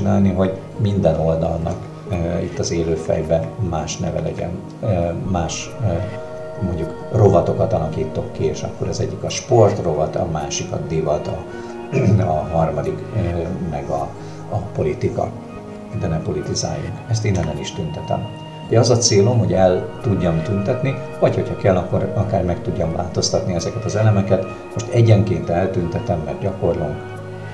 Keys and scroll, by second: 2.6 Up, 17.4 Delete.